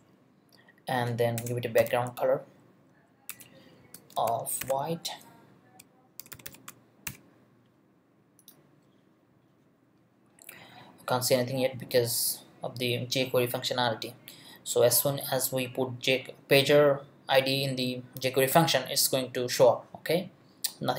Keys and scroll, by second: 1.4 Return, 1.5-2.4 typing, 2.9 Down, 3.3 Return, 3.8 space, 4.6 shift+3, 6.2 shift+f, 7.0 shift+;.